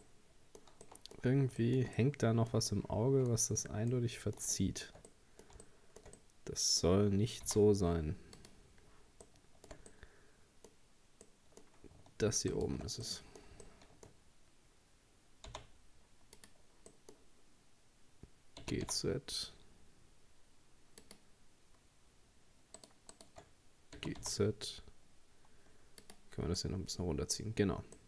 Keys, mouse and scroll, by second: 0.0-3.4 middle drag, 3.4-3.9 scroll up 5, 3.9-7.4 middle drag, 7.4 z, 9.3-10.8 shift+middle drag, 10.8-11.3 scroll up 2, 11.3-12.5 middle drag, 12.5 shift+right click, 13.1-15.5 middle drag, 15.5 z, 16.9-18.6 middle drag, 18.6 g, 22.8 shift+right click, 23.2 shift+right click, 24.0 g, 26.6-28.0 middle drag.